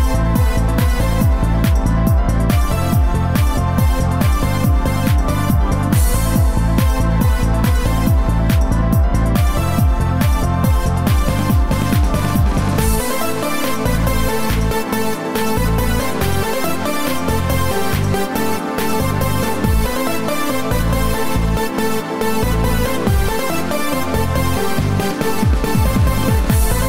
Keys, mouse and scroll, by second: 6.8 click, 12.8 click, 16.0 middle click, 25.7 click.